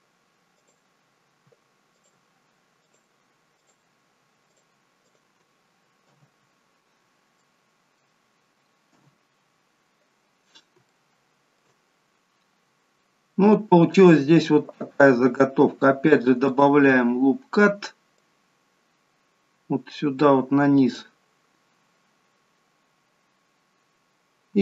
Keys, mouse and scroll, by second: 1.9 click, 3.0 shift+click, 3.5 shift+click, 4.4 click, 5.0 shift+click, 6.0 f, 6.5-6.9 scroll down 3, 7.4 shift+middle click, 8.8 KP_1, 10.4 scroll down 1, 10.8 shift+middle click, 11.8-12.8 scroll down 1, 12.8 scroll up 1, 16.4 click, 18.2 click, 21.9-24.6 scroll up 2.